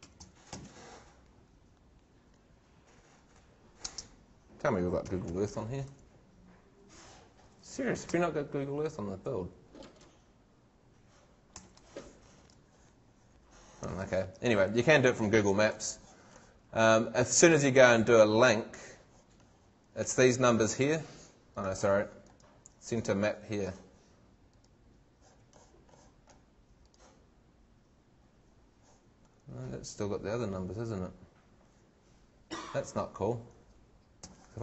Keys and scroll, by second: 1.5 e, 3.9 space, 5.0 e, 6.9 h, 7.1 Left, 8.1 Delete, 12.3 super+Tab, 13.9 super+Tab, 34.2 super+c.